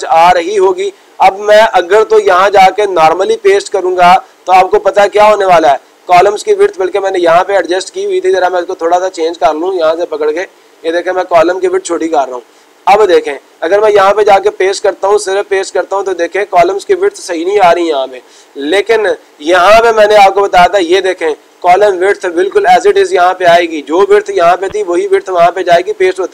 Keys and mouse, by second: 3.1-4.2 drag, 8.9 click, 11.5-12.5 drag, 14.9-16.0 drag.